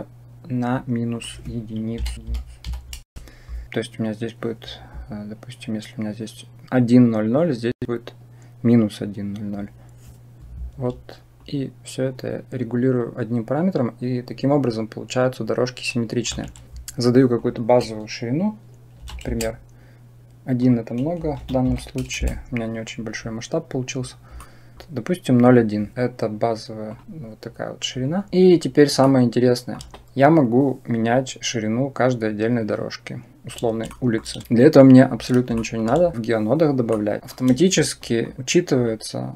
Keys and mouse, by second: 0.9 click, 2.1-3.6 drag, 11.2-16.1 shift+drag, 17.2-19.1 drag, 20.5-22.1 drag, 24.3-24.7 middle drag, 28.9 shift+middle click, 33.8 shift+middle click, 34.4 Delete, 35.5 shift+click, 36.8 middle click, 38.0 shift+click, 39.2 click.